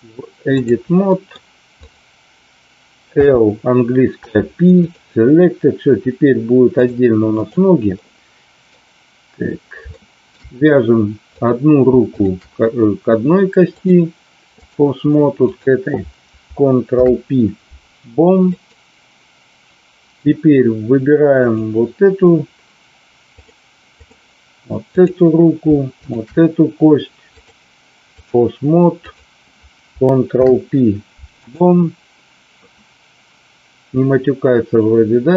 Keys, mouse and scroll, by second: 1.0 middle click, 1.7 click, 3.1 l, 4.1 p, 6.7 click, 7.9-8.6 middle drag, 9.9-10.2 shift+middle drag, 11.2 click, 12.1 shift+click, 13.9-14.7 drag, 16.8 ctrl+p, 21.2 click, 23.2 click, 25.0 click, 26.0 shift+click, 27.4-28.4 drag, 29.0 click, 30.2 ctrl+p.